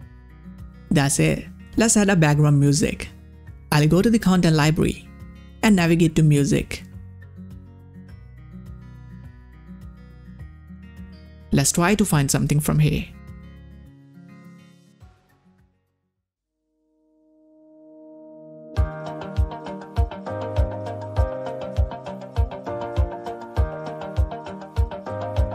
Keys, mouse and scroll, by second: 1.7-2.8 drag, 4.4 scroll down 1, 4.4 click, 6.4 click, 11.4-12.8 typing, 15.6 Return, 17.7 click.